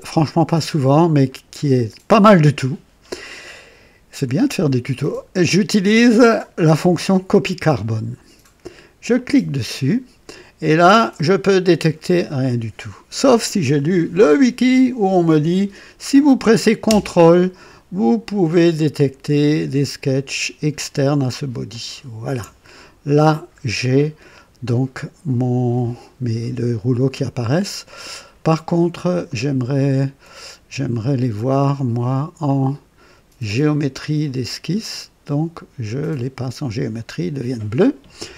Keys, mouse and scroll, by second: 1.2 right click, 9.1 click, 21.6 ctrl+click, 26.8 scroll up 2, 27.6 right click, 29.2 right click, 30.8 click, 32.4 click, 33.4 click, 34.7 click, 35.9 click.